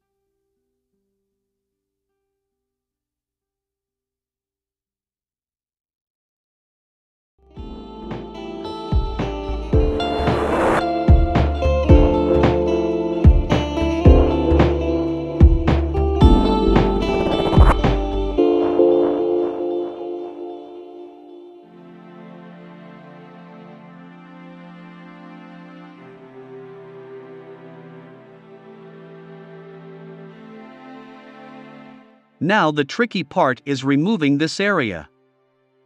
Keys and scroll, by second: 12.8-13.7 typing, 29.6 v.